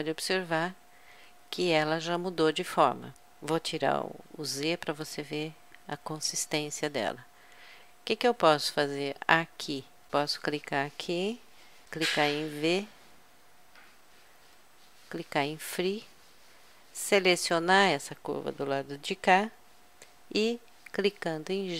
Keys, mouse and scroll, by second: 4.4 z, 10.1-11.3 drag, 11.9 v, 17.3-19.0 drag, 20.3 g.